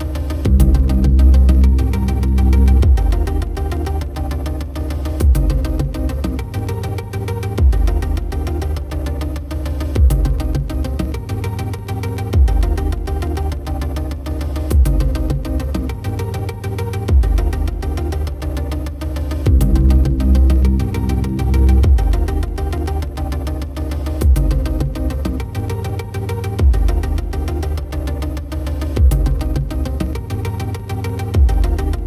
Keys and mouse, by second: 0.2 right click, 0.6 right click, 0.8 right click, 1.4 right click, 1.6 right click, 1.9 right click, 2.3 right click, 2.9 right click, 3.5 right click, 3.9 right click, 4.1 right click, 4.4 right click, 4.8 right click, 5.5 right click, 6.1 right click, 7.9 right click, 8.1 right click, 8.4 right click, 8.7 right click, 9.7 right click, 10.1 right click, 10.6 right click, 11.5 right click, 11.9 right click, 12.2 right click, 12.6 right click, 13.3 right click, 13.7 right click, 14.7 right click, 16.5 right click, 17.5 right click, 17.8 right click, 18.3 right click, 18.9 right click, 19.5 right click, 20.2 right click, 21.0 right click, 21.4 right click, 21.7 right click, 22.7 right click, 23.1 right click, 23.4 right click, 23.6 right click, 24.0 right click, 24.7 right click, 25.7 right click, 26.1 right click, 26.6 right click, 26.9 right click, 27.5 right click, 28.2 right click, 30.0 right click, 31.2 right click, 31.9 right click.